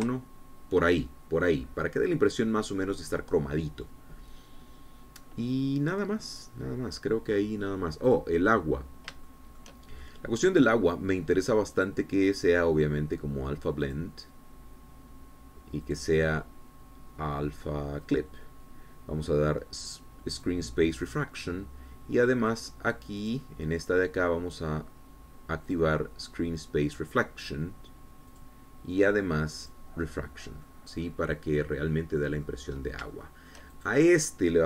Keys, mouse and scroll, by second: 0.7 KP_Decimal, 0.9 KP_1, 1.0 KP_Enter, 3.0-3.4 scroll down 2, 3.5-5.0 drag, 9.1 click, 9.9 scroll down 2, 10.3 shift+click, 11.0 shift+middle click, 11.2 click, 11.2 middle click, 12.8 click, 14.9 click, 16.8 click, 19.1 click, 21.4 click, 23.5 click, 24.2 click, 26.7 click, 29.3 click, 30.6 click, 31.7-33.6 middle drag, 33.7 scroll up 1, 34.2 shift+middle click.